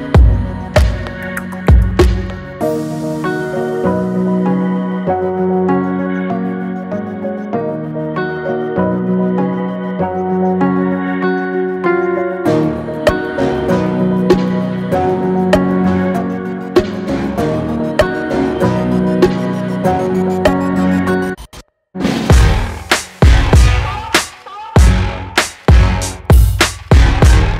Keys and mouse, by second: 0.6-1.4 drag, 3.9-4.5 drag, 9.4 click, 11.1-14.4 middle drag, 18.8 click, 20.8 shift+drag, 21.0-21.5 shift+middle drag, 22.6-23.8 drag, 25.6 click, 26.6 click, 27.4-27.5 drag.